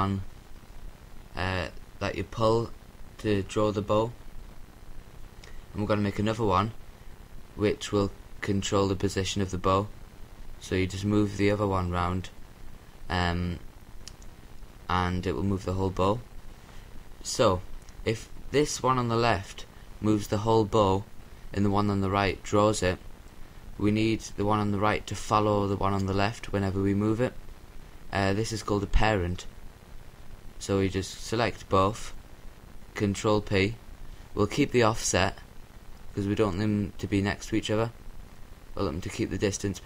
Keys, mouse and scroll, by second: 2.4-4.0 drag, 7.1 shift+d, 8.0-9.9 right drag, 8.6 r, 11.3-14.2 drag, 25.2-26.4 right drag, 27.9-29.9 right drag, 30.5 ctrl+p, 37.8-39.7 drag, 39.7-39.8 middle drag.